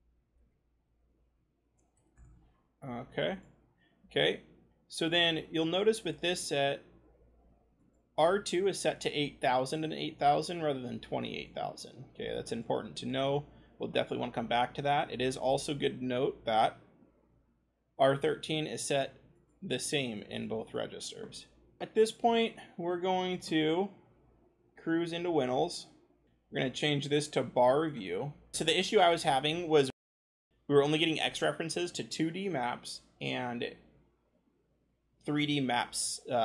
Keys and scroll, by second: 0.0-2.0 typing, 2.1 Return, 26.2-28.5 scroll, 28.5 ctrl+shift+c.